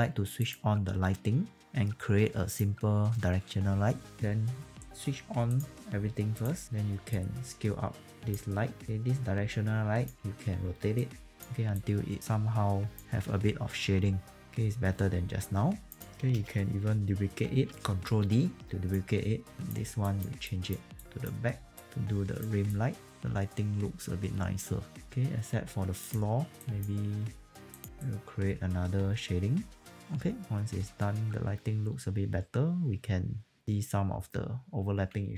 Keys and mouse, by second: 0.4 click, 2.5 click, 4.3 click, 4.3 r, 5.5 click, 6.7 r, 7.1 click, 8.3 w, 8.8 click, 10.2 e, 11.0 click, 14.4 click, 17.2 ctrl+d, 17.7 w, 18.0 click, 25.0 click, 28.5 right click, 29.8 click.